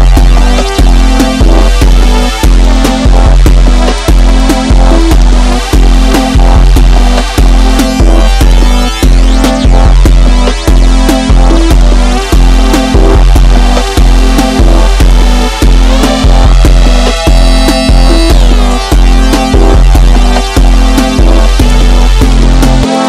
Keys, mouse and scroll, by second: 0.3 click, 3.2 click, 4.8 click, 6.6-9.2 middle drag, 9.2-9.7 scroll down 1, 9.7 Tab, 10.2 shift+scroll down 1, 10.3-11.7 shift+middle drag, 11.7 KP_1, 12.4-12.9 shift+middle drag, 12.9-13.3 scroll up 2, 13.3 Tab, 13.5-14.7 middle drag, 14.7 ctrl+r, 18.7 shift+middle click, 19.6 click, 20.5 ctrl+shift+click, 22.3 KP_3.